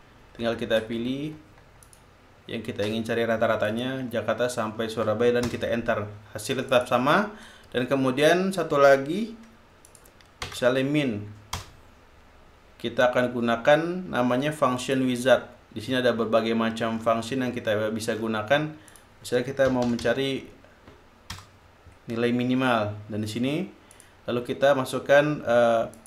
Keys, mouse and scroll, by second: 2.5 ctrl+click, 4.3 shift+click, 6.1 shift+Return, 7.3 click, 10.5 click, 11.1 BackSpace, 12.2 Return, 15.5 click, 17.5 scroll down 1, 18.1 scroll down 1, 18.8-19.1 scroll down 1, 19.5 click, 20.1-21.2 typing, 22.0 Return, 24.5 click.